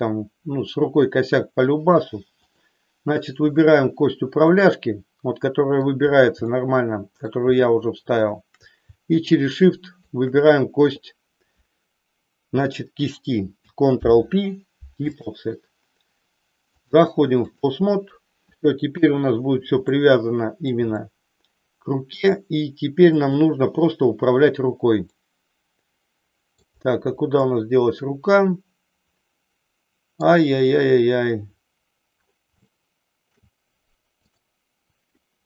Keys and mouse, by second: 4.4-5.9 middle drag, 6.5 shift+middle click, 7.6 shift+middle click, 9.2-10.2 shift+drag, 13.8 ctrl+p, 16.8-17.8 drag, 18.9 KP_1, 19.9 middle click, 21.0-22.3 middle drag, 23.2 click, 25.2-26.6 middle drag, 27.4-30.2 middle drag, 32.6 shift+middle click, 34.3 click.